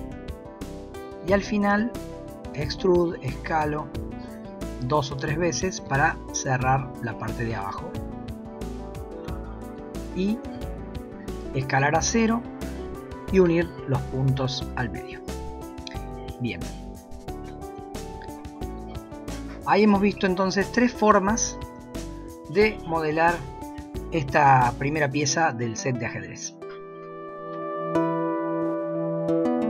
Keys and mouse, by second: 1.7 e, 2.5 s, 5.6 e, 5.9 s, 7.3 e, 10.2 e, 10.5 s, 12.8 m, 15.5 click, 16.7 Tab, 17.1 shift+middle drag, 18.7 middle click, 19.0-19.5 middle drag, 19.7 middle click, 21.7-22.6 middle drag, 24.4-25.0 middle drag.